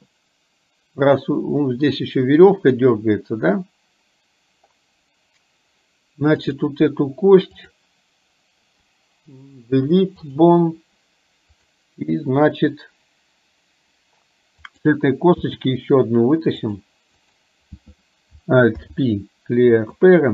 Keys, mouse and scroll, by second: 6.5 click, 7.6 click, 9.6 Delete, 14.8 click, 15.5 e, 18.8 alt+p.